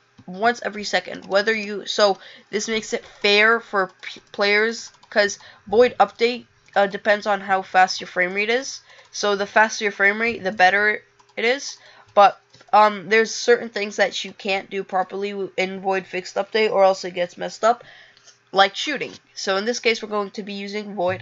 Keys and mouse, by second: 6.2 click, 6.8 click, 7.8 click, 8.5 click, 10.7 click, 11.7 click, 12.2 click.